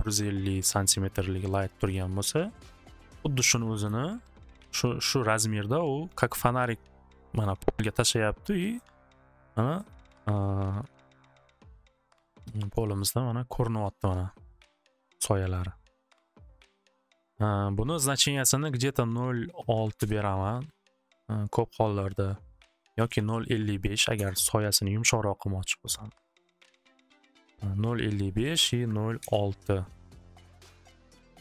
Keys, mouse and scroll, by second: 0.9 click, 1.9 click, 3.5 click, 3.6 click, 3.6 typing, 3.9 Return, 8.8 middle click, 9.5 middle click, 10.1 middle click, 10.4 middle click, 12.5 middle click, 13.0 middle click, 13.4 middle click, 14.9 middle click, 15.6 middle click, 16.7 middle click, 18.5 click, 19.6 click, 19.7 6, 20.0 Return, 22.3 click, 23.1 5, 23.2 5, 24.2 Return, 28.6 click, 28.9 typing, 29.2-31.0 Return, 31.0-31.4 drag.